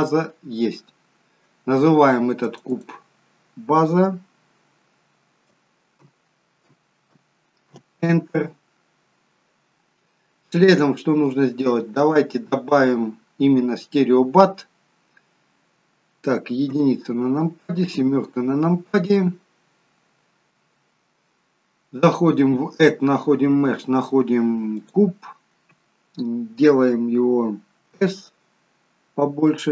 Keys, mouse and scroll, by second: 20.8 n, 22.1 click, 28.1 s.